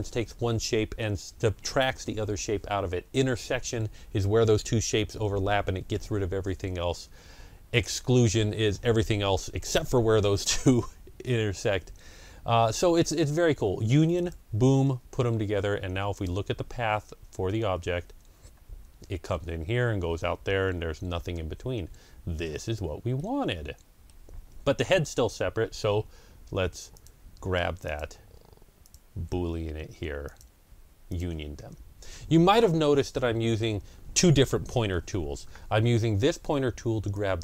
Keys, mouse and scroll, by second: 14.2 click, 16.0 click, 17.4 ctrl+scroll up 1, 21.4 scroll down 1, 22.0 ctrl+scroll down 1, 23.0-25.6 middle drag, 24.8-25.4 ctrl+scroll down 2, 25.6 ctrl+scroll down 1, 26.8 click, 27.7 click, 30.1 shift+click, 31.0 shift+click.